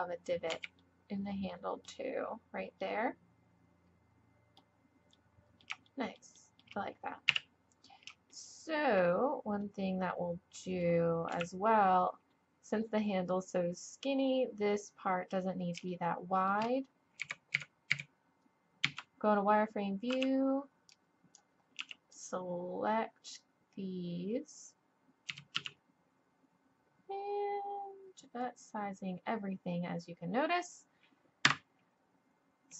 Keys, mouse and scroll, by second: 0.5 z, 1.0-3.2 middle drag, 3.7 middle click, 4.3 middle click, 4.5 middle click, 4.8 middle click, 6.1 middle click, 6.1 click, 6.3 middle click, 6.4 click, 6.5 middle click, 7.0 click, 7.3 KP_1, 11.3 KP_1, 17.2 click, 17.2 a, 17.6 a, 17.9 a, 18.8 z, 20.1 b, 21.8 b, 25.3 s.